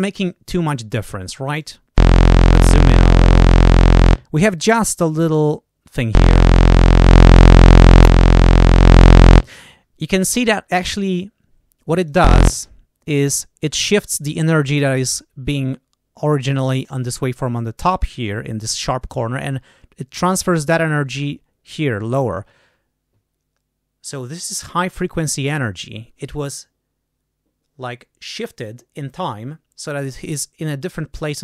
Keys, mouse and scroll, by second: 1.4 click, 6.9 click, 7.9 click, 8.7 click, 11.9 click.